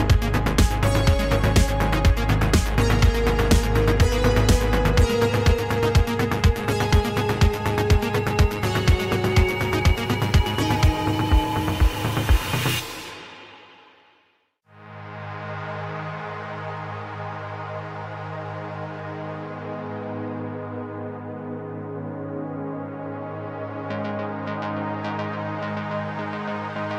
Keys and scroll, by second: 2.7 ctrl+s, 5.4 ctrl+a, 9.5 g, 10.4 e, 11.7 e, 14.2 Tab, 15.5 Tab, 15.9 g, 16.3 Tab, 18.4 Tab, 19.2 g, 23.4 g, 23.5 g, 25.4 g, 26.2 Tab.